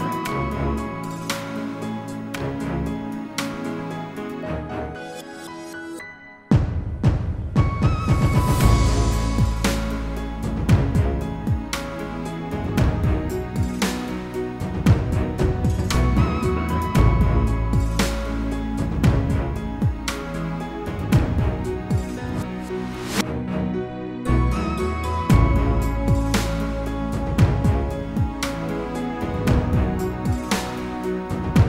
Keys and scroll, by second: 16.7 ctrl+g.